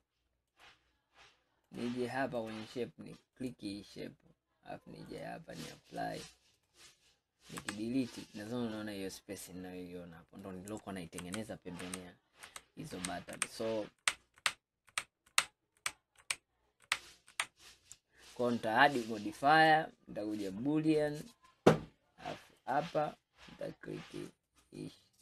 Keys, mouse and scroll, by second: 0.6-1.8 drag, 2.5 click, 5.1-6.7 drag, 7.6 Delete, 8.6-11.3 middle drag, 11.3 ctrl+z, 11.9 ctrl+z, 13.0 ctrl+z, 13.4 ctrl+z, 14.4 ctrl+z, 15.0 ctrl+z, 15.4 ctrl+z, 16.0 ctrl+z, 16.3 ctrl+z, 16.9 ctrl+z, 18.7-19.6 drag, 21.3-22.7 drag.